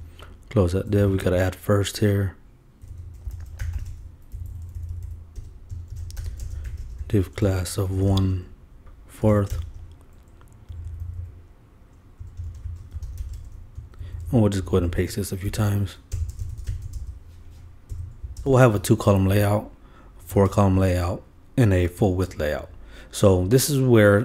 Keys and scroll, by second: 0.0-0.3 typing, 0.8 shift+Up, 5.7-9.8 typing, 10.7 shift+Down, 12.4 shift+Return, 12.5 shift+,, 12.6 shift+/, 13.3 shift+., 14.0 shift+Up, 14.8 shift+super+Up, 14.9 shift+super+Left, 15.5 shift+super+c, 15.7 super+Right, 16.2 super+Return, 16.3 super+v, 16.4 super+Return, 16.6 super+v, 16.7 super+Return, 17.0 super+v, 18.2 super+BackSpace, 18.5 super+v.